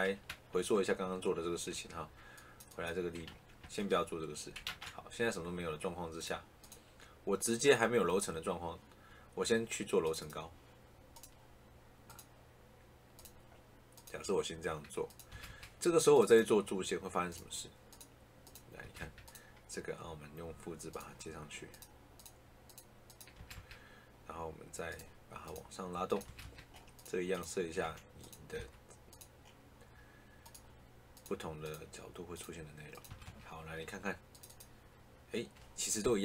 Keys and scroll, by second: 3.2 ctrl+z, 15.2 Escape, 18.7 Escape, 23.2 Escape, 26.1 Escape, 27.7 a, 28.4 Escape, 33.0 Escape.